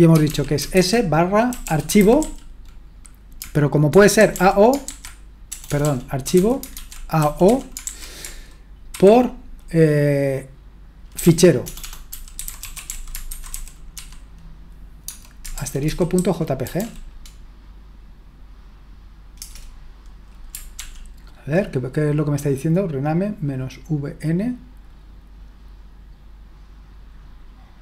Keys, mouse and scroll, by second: 0.0-7.8 typing, 8.9 typing, 10.9-17.2 typing, 20.8 ctrl+p.